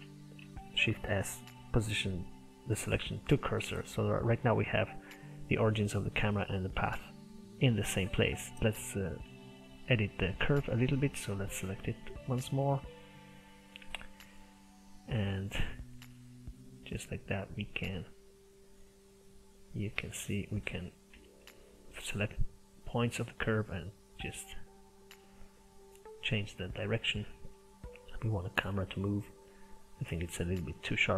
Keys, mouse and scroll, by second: 0.4 shift+s, 3.7 middle click, 4.5 click, 5.1-6.8 middle drag, 6.8 click, 7.3-8.5 middle drag, 8.9 click, 9.3 Tab, 10.2 click, 10.9 middle click, 11.4 click, 13.0 click, 13.9 Tab, 14.3-15.4 middle drag, 15.4 click, 17.0-20.0 drag, 21.1 b, 23.0-27.2 drag, 27.2 middle click, 27.6 scroll up 1, 27.8 shift+middle click, 28.6 click, 29.3 click, 29.9 scroll up 2, 30.2 click, 30.9 click.